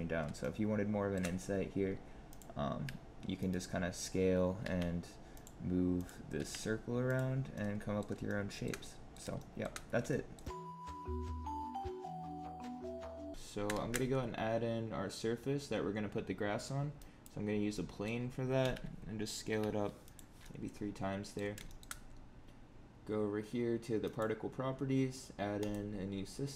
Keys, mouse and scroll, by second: 13.3 shift+middle click, 13.7 shift+a, 17.6 middle click, 18.1-18.5 scroll down 3, 18.5 s, 20.3 middle click, 21.6 shift+middle click, 24.0 click, 25.5 click.